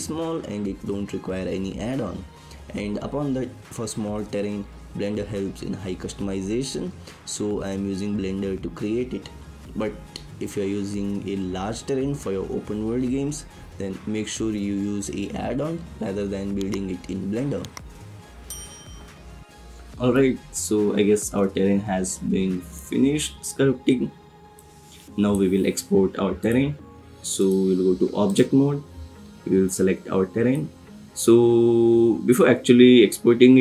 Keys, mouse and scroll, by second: 0.5-3.1 drag, 5.0 click, 7.0-7.9 drag, 8.7 middle click, 10.0 click, 20.1-22.7 drag, 24.6 click, 26.6-27.5 drag, 29.6 click.